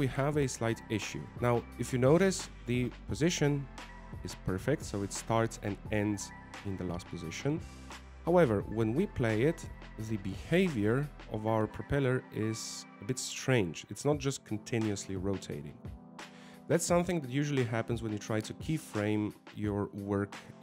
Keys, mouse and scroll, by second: 1.0-1.5 scroll down 5, 2.5 scroll up 3, 3.8 click, 5.0 click, 5.6 w, 10.2 click, 10.8 alt+a, 11.2-11.7 scroll down 4, 11.9 middle click, 13.9-14.3 scroll up 3, 15.9 alt+a, 17.3 click, 17.7 scroll down 3.